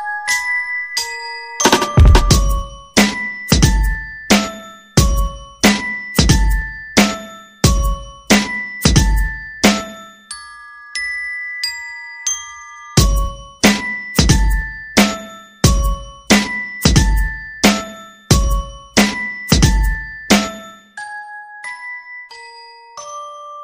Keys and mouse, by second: 0.5 middle click, 1.3 middle click, 1.7 middle click, 2.4 g, 5.5 middle click, 6.1 g, 6.9 right click, 7.1 g, 7.5 KP_3, 8.1 shift+middle click, 8.7 g, 9.6 right click, 9.8 g, 11.5 shift+right click, 13.0 e, 14.7 right click, 15.9 m, 17.7 right click, 18.4 r, 19.1 g, 20.3 g, 21.2 alt+z, 21.8 right click, 22.6 right click.